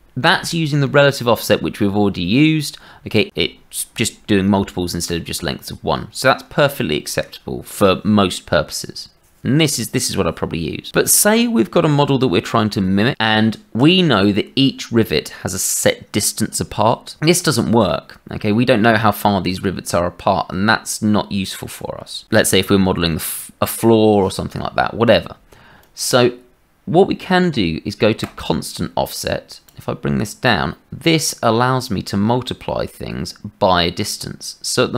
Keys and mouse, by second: 25.8 click, 28.2 click, 29.6 click.